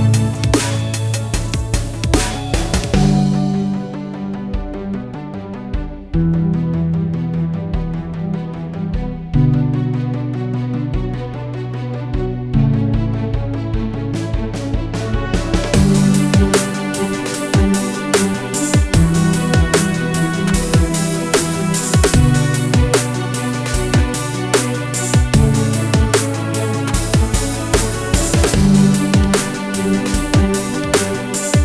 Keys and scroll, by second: 13.1-14.1 typing, 17.8 Return, 18.3-20.1 typing, 21.7-26.6 typing, 26.8 Return, 30.7-31.4 typing.